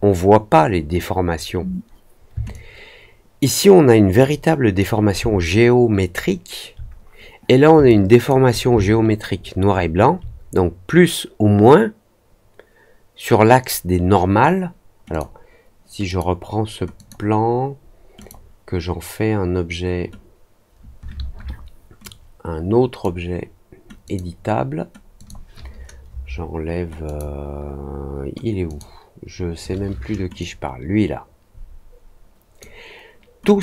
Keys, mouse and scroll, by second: 2.4-4.7 alt+drag, 5.5 alt+middle click, 6.1 alt+middle click, 7.8 alt+click, 8.9 alt+middle click, 9.3 alt+middle click, 9.7 alt+middle click, 15.0 click, 16.0 click, 16.9 click, 18.1 click, 21.9-22.9 drag, 24.0 click, 25.1 click, 27.0 click, 28.6 click, 30.3-32.5 drag.